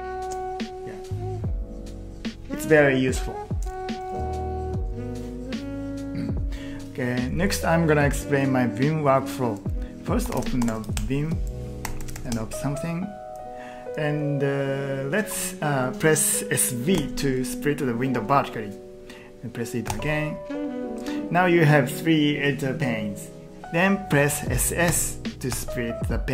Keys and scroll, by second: 4.2 q, 5.7 typing, 10.0-12.5 typing, 16.7-17.4 typing, 19.6-20.3 typing, 24.9 s, 25.6 s.